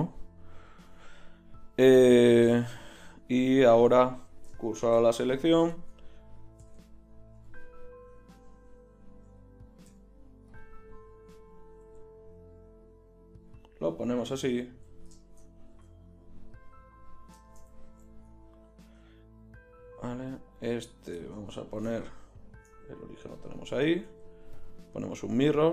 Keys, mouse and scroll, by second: 3.0-4.1 middle drag, 4.1-5.6 drag, 4.8 shift+s, 5.6-8.0 right drag, 6.6 a, 6.8 a, 7.4 ., 9.9 ., 11.7 r, 14.7 KP_1, 15.7 Tab, 21.7 shift+c, 23.9 ctrl+shift+q.